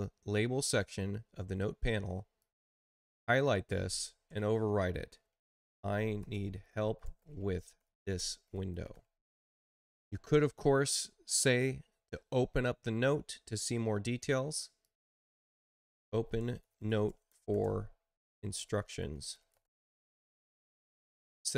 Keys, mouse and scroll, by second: 2.3 click, 5.1-9.1 typing, 14.7 click, 15.5-20.0 typing.